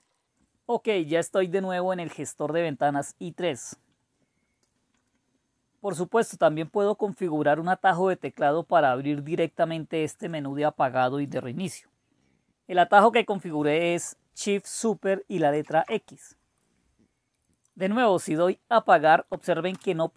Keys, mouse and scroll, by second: 15.4 super+x, 19.7 Return.